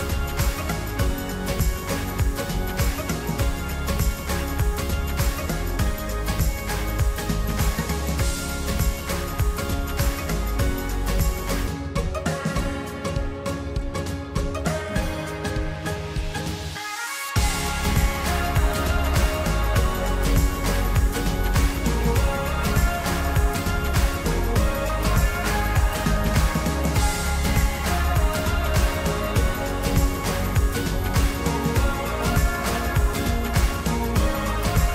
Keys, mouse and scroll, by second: 5.0-6.9 shift+middle drag, 6.9-8.0 scroll up 2, 8.0-9.0 shift+middle drag, 9.0-10.2 scroll up 1, 11.5-13.1 drag, 13.2-15.8 drag, 18.3-20.9 drag, 24.2-25.3 middle drag, 25.3 scroll up 2, 25.8-28.3 middle drag, 29.2 scroll down 1, 29.9-30.4 scroll down 6, 30.4-31.2 middle drag, 31.2 scroll up 2, 31.7 middle drag, 33.1-34.9 middle drag.